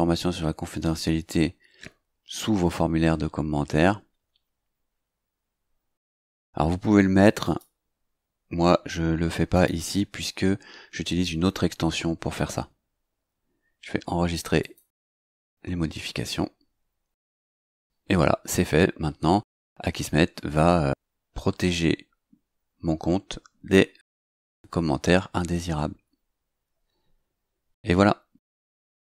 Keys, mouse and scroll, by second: 7.4 click, 9.5 click, 14.5 click.